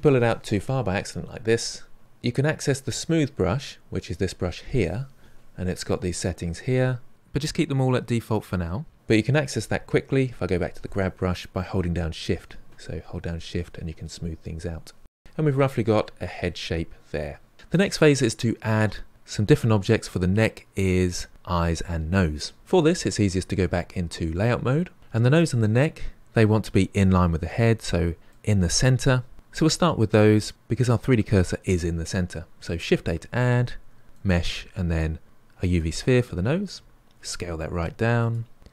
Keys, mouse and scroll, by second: 4.2-7.1 drag, 10.2-11.3 drag, 11.3 middle click, 12.1 shift+click, 13.0-17.5 middle drag, 27.8-30.1 middle drag, 32.9 shift+a, 38.1 s.